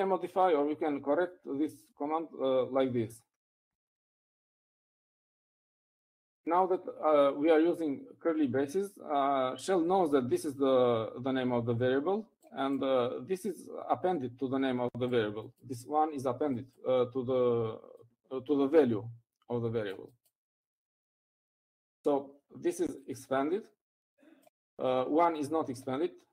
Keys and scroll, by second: 1.5 Up, 2.1 Left, 2.3 Left, 2.5-3.0 Left, 3.1 Left, 3.5 Left, 5.0 shift+[, 5.1 Right, 5.5 Right, 6.1 Right.